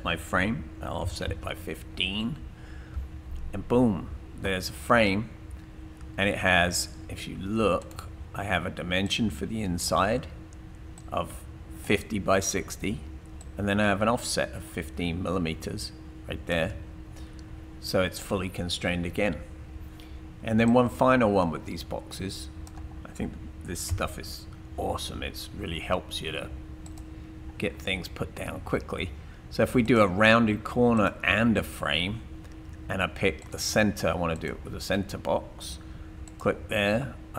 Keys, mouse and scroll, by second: 1.0 typing, 2.2 Tab, 2.3 typing, 6.0-6.8 typing, 7.8 right click, 9.0 click, 9.6-10.8 typing, 13.4-16.5 drag, 20.7 click, 23.9 Delete, 26.9 click.